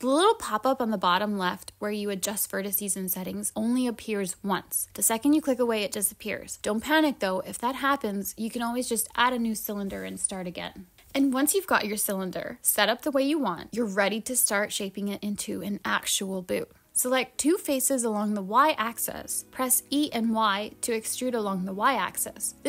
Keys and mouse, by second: 6.2 BackSpace, 6.5 click, 7.4-8.7 drag, 10.6 click, 12.6 click, 13.4-14.6 drag, 15.2 click, 15.3 click.